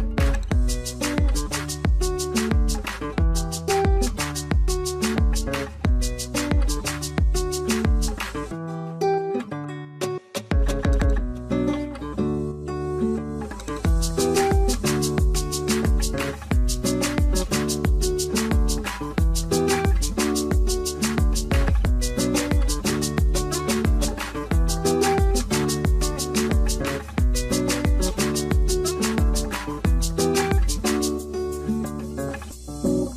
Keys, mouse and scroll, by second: 1.6-2.0 scroll, 2.0 ctrl+z, 2.4 alt+middle click, 3.4 r, 6.7 middle click, 7.2 middle click, 7.2 w, 16.5 ctrl+z, 16.7 middle click.